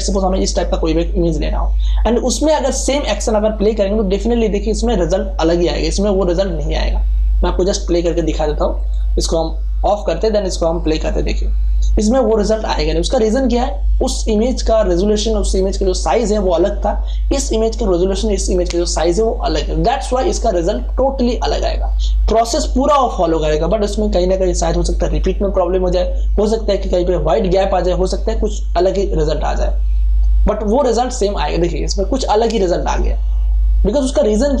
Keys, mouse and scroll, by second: 0.1 click, 5.9 click, 8.1 click.